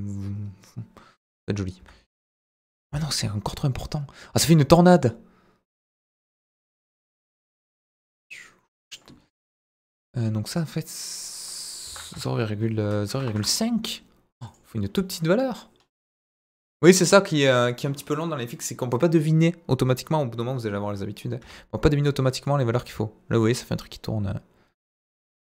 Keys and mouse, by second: 2.9-9.0 drag, 10.9-13.6 drag, 14.4 click, 16.2 click, 16.8-21.5 drag, 22.4-25.4 drag.